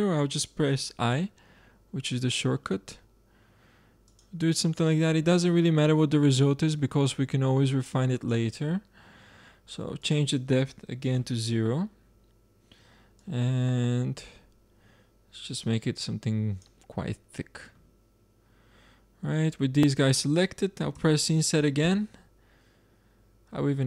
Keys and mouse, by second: 1.0 i, 6.3-8.7 middle drag, 9.9-11.9 drag, 11.9-13.1 middle drag, 13.1-15.0 drag, 18.4-23.8 middle drag.